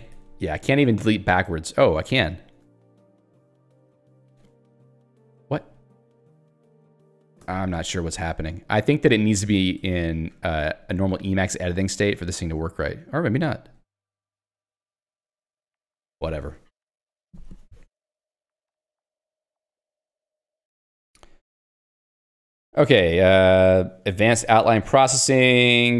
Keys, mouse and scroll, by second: 0.6 a, 1.1 Delete, 5.8 ctrl+/, 7.4 Escape, 8.6 a, 9.8 ctrl+z, 10.7 a, 11.8 Delete, 14.9 ctrl+/, 25.3 ctrl+z.